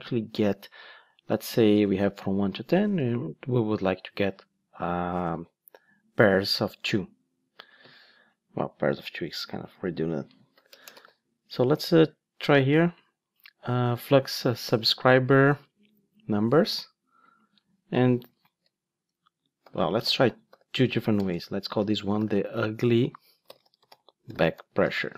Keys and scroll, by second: 9.8 super+c, 11.0 super+v.